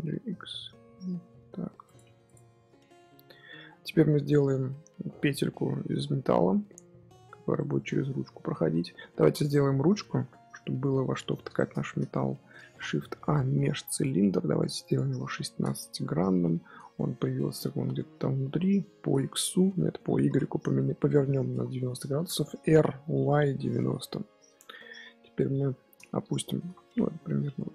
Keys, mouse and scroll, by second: 2.0 Tab, 2.2 click, 2.4 scroll down 3, 2.6-5.9 middle drag, 5.9-6.4 scroll up 3, 7.3-8.3 middle drag, 8.3 scroll up 1, 8.5 KP_1, 12.2-12.6 shift+middle drag, 12.6 shift+a, 14.8-16.8 drag, 16.8 z, 18.8 r, 26.4 g.